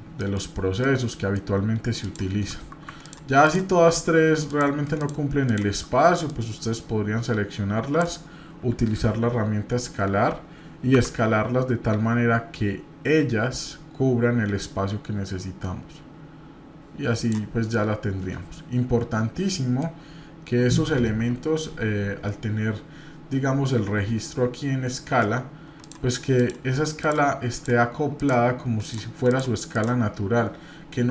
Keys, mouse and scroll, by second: 0.2 middle click, 0.8 middle click, 1.5 scroll up 1, 2.0 click, 3.0 ctrl+click, 4.5 click, 5.0 shift+click, 6.2-8.0 drag, 9.2 s, 17.7-19.9 middle drag, 25.8 click, 26.3 click, 27.0 click, 27.5 click, 28.2 click, 28.8 click, 29.3 click, 29.7 click.